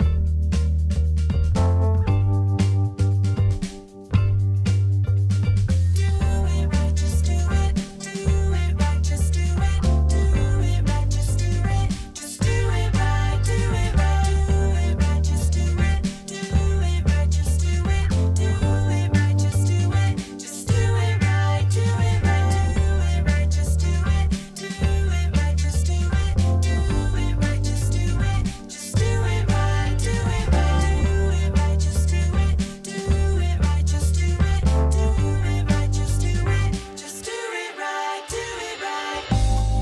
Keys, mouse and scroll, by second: 11.1-12.3 drag.